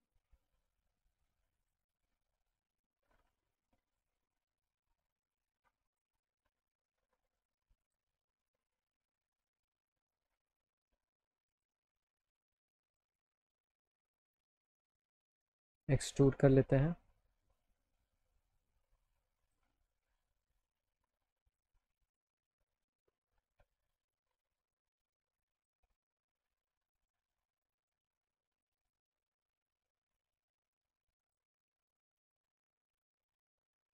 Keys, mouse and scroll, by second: 1.6 click, 2.5 alt+middle click, 3.2 click, 4.9-6.0 drag, 6.3 alt+middle click, 7.9 click, 11.5 click, 13.0 click, 14.2 right click, 15.2 click, 15.6 click, 17.4-19.5 drag, 20.0 alt+middle click, 20.6 middle click, 21.4 click, 22.4 click, 25.0 click, 26.0 alt+middle click, 27.6 right click, 29.1-30.4 alt+middle drag, 31.2 click, 32.2-33.4 alt+middle drag, 33.8 click.